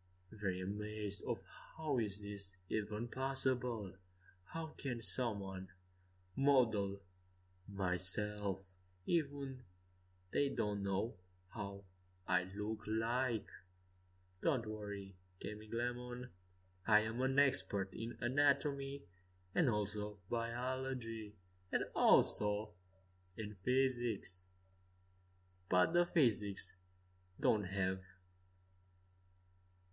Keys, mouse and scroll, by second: 0.5-2.5 drag, 2.5-4.5 right drag, 4.3 middle click, 6.7-7.9 middle drag, 8.6 Tab, 9.3-11.5 middle drag, 12.4 Tab, 13.2-15.2 middle drag, 15.4 middle click, 17.2 KP_5, 17.5 KP_1, 18.0 KP_3, 20.3 click, 21.4-23.9 drag, 21.8 right click, 22.5 z, 23.9-29.2 middle drag.